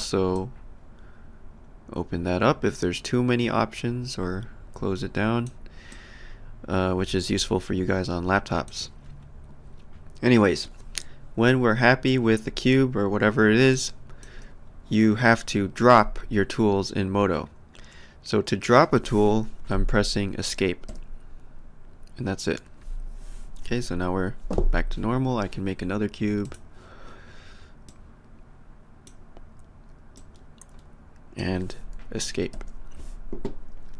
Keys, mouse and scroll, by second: 0.3 click, 5.9 click, 13.7 alt+click, 20.9 Escape, 26.4 click, 27.8 click, 30.2 click, 32.5 Escape.